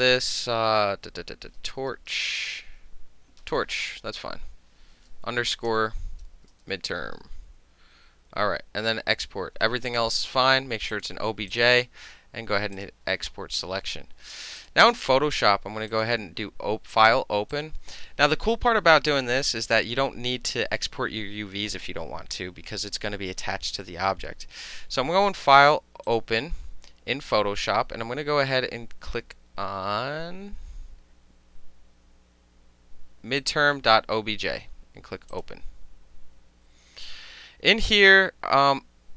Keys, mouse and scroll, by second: 1.4-2.7 typing, 5.3-7.6 typing, 11.0 click, 11.6 click, 12.8 click, 14.7 click, 16.0 click, 17.6 click, 26.1 click, 33.4 click, 35.4 click.